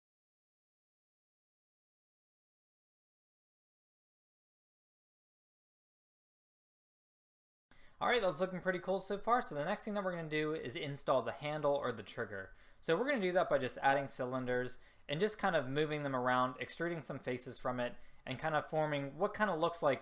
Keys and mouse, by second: 0.7-1.9 middle drag, 2.7 middle click, 4.5 click, 5.4 middle click.